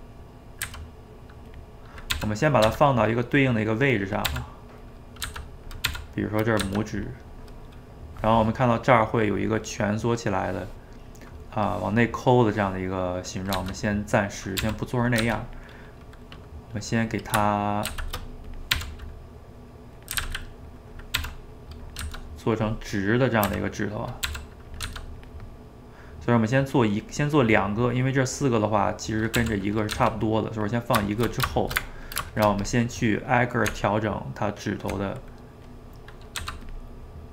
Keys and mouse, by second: 0.1 middle click, 0.6 s, 1.7 middle click, 2.1 r, 2.7 g, 3.2-4.3 middle drag, 4.3 r, 5.3 g, 5.9 r, 6.6 g, 7.3-10.4 middle drag, 11.1-13.6 middle drag, 13.6 g, 15.2 g, 15.7-17.9 middle drag, 17.9 shift+d, 18.8 r, 20.2 s, 21.2 r, 22.0 g, 23.5 s, 24.3 r, 24.9 g, 25.5-29.4 middle drag, 29.4 r, 30.0 g, 31.1 shift+middle click, 31.5 shift+right click, 31.9 ctrl+middle click, 32.7 click, 33.2 middle click, 33.7 Tab, 35.2-36.4 middle drag, 36.4 f, 36.9 middle click.